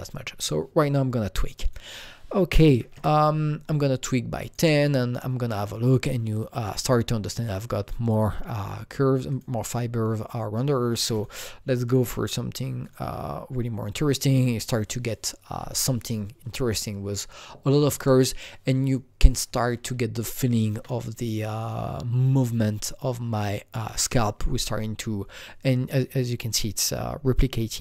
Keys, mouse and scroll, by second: 1.5 click, 1.6 double click, 2.8 KP_0, 2.8 KP_1, 2.9 Return, 4.4 click, 9.3 KP_Enter, 9.3 click, 11.0 click, 11.1 double click, 11.8 KP_4, 12.0 KP_Enter, 12.8 click, 19.2 KP_Enter, 19.2 click, 19.2 KP_4, 19.3 click, 20.2-22.4 shift+right drag, 21.6 click, 22.3-23.4 scroll up 5, 23.4-25.2 scroll down 1.